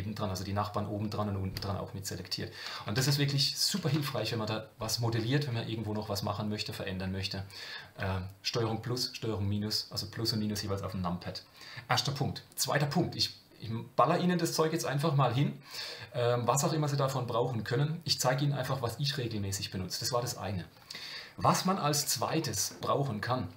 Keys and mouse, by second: 3.0 ctrl+KP_Add, 3.7-4.3 ctrl+KP_Subtract, 13.1 Tab, 21.9 Tab, 22.8 middle click.